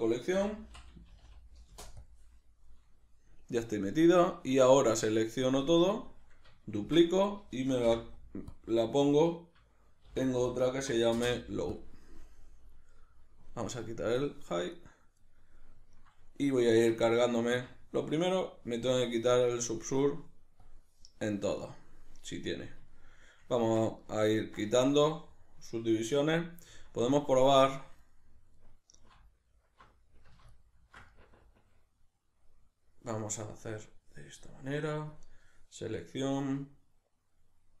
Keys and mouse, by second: 3.9-5.7 drag, 5.7 a, 6.9 shift+d, 7.3 right click, 7.9 m, 13.3-14.7 drag, 14.7 right click, 16.7 Tab, 18.8-19.4 drag, 19.4 right click, 20.6-21.3 drag, 21.3 right click, 22.9-30.5 shift+middle drag, 23.6 Tab, 26.7 Tab, 30.5 ctrl+alt+right click, 31.1-35.1 middle drag, 35.1-37.8 drag.